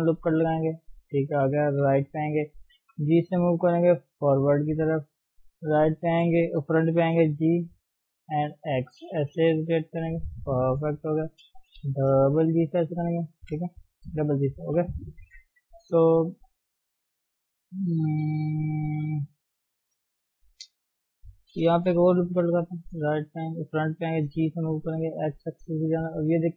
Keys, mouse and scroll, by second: 0.0 ctrl+r, 1.6 KP_3, 2.9 g, 4.1-5.5 middle drag, 5.5 KP_1, 6.9 g, 9.4 r, 11.1 Left, 11.9 g, 13.1 Left, 13.4 g, 14.4 Left, 14.8 g, 15.8 KP_3, 17.7-22.0 middle drag, 22.0 ctrl+r, 22.9 KP_1, 24.2 g, 26.3 click.